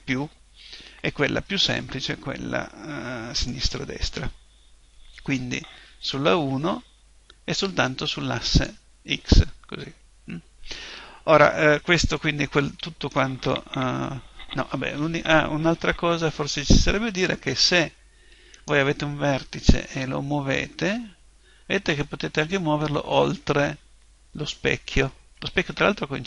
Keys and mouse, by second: 6.2 KP_1, 9.4 click, 11.9-16.2 middle drag, 16.2 KP_1, 18.6 middle click, 19.4 right click, 19.8 g, 20.3-23.2 middle drag.